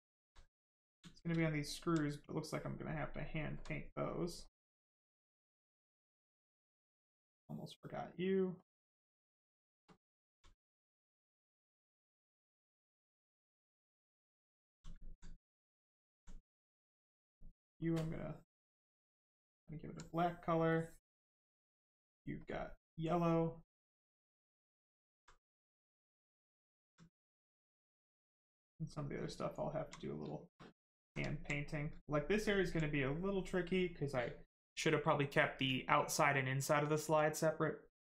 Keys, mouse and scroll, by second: 0.7 right click, 1.5 alt+right click, 2.0 right click, 2.1 right click, 3.0 alt+click, 4.1 click, 7.0 alt+click, 8.5 click, 9.1 right click, 9.4 shift+right click, 9.9 alt+right click, 10.4 right click, 10.5 right click, 14.3 alt+click, 14.9 alt+right click, 16.6 click, 16.7 click, 19.5 alt+click, 20.7 click, 24.3 click, 25.0 alt+right click, 25.6 right click, 25.7 right click, 25.8 shift+right click, 26.5 alt+right click, 26.9 right click, 26.9 right click, 29.3 alt+right click, 30.0 right click, 30.1 right click, 30.2 shift+right click, 30.9 alt+click, 31.3 alt+right click.